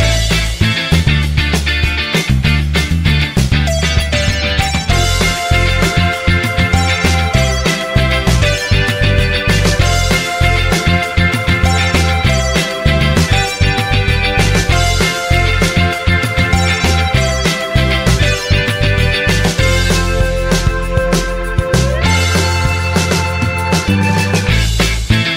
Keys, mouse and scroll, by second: 0.7 Return, 7.1 0, 13.4 typing, 18.5-19.2 typing.